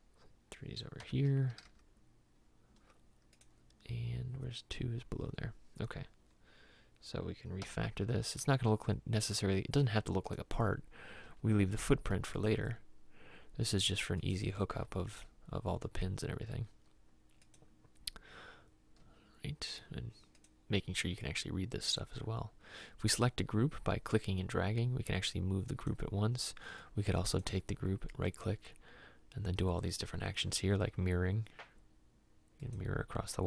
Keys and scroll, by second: 1.1 m, 1.7 r, 7.8 m, 11.4 m, 15.0 m, 19.2 m.